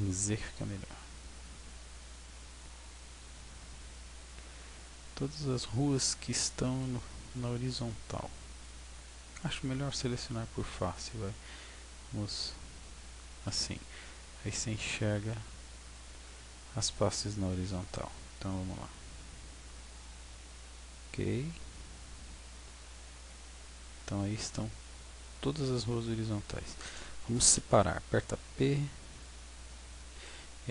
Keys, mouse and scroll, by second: 1.6 b, 6.2 b, 11.0 click, 17.6 b, 21.3 b, 22.2 b, 28.1 p, 30.1 Tab.